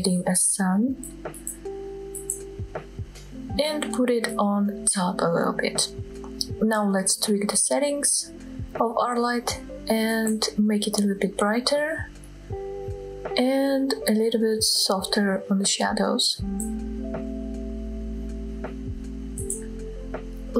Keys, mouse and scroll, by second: 4.7 g, 5.2 z, 6.3 drag, 6.6 scroll down 1, 6.9-7.2 shift+middle drag, 7.5 middle click, 7.9-8.5 scroll up 1, 9.2 click, 9.7-10.6 scroll up 2, 10.6-11.8 drag, 15.2-20.5 drag.